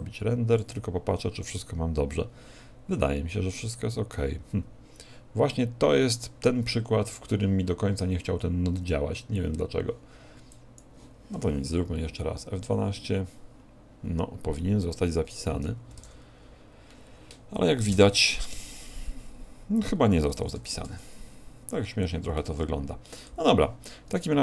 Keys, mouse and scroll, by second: 10.5 click, 12.7 F12.